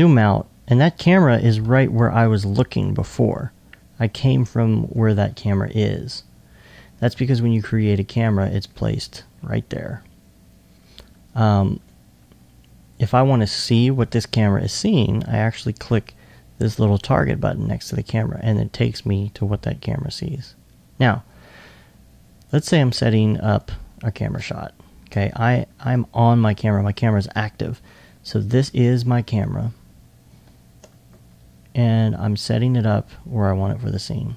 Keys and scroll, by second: 5.4 alt+1, 13.2 alt+2, 14.4 alt+2.